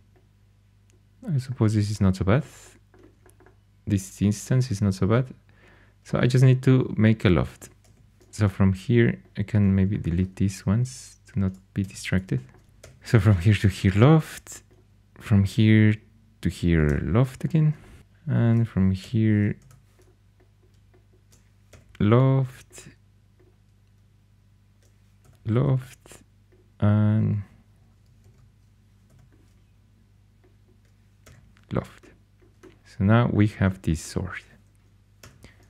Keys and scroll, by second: 7.8 2, 11.7-13.2 typing, 16.8 l, 18.9 l, 19.5 Escape, 21.6 i, 25.1 i, 28.1 super+z, 29.0 i, 31.2 i, 35.2 4.